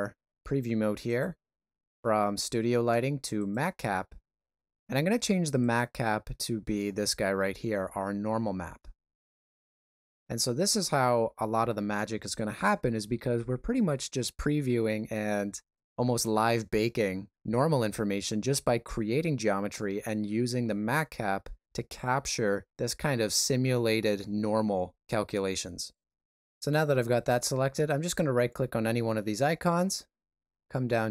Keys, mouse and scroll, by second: 1.0 click, 29.2 right click.